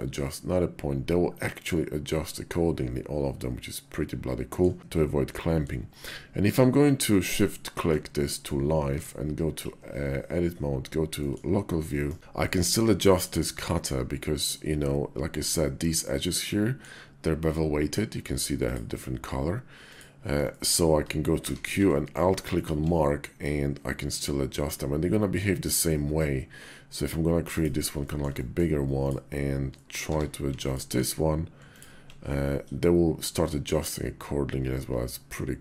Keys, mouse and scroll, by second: 8.1 middle click, 8.7 Tab, 10.1 /, 11.0 click, 11.6 shift+click, 12.2 KP_5, 12.2 click, 12.9 shift+middle click, 13.4 middle click, 15.1 click, 15.7 middle click, 18.3 click, 19.6 click, 20.2 shift+click, 21.2 q, 27.9 shift+click, 28.2 middle click, 28.7 click, 29.5 middle click, 29.9 q.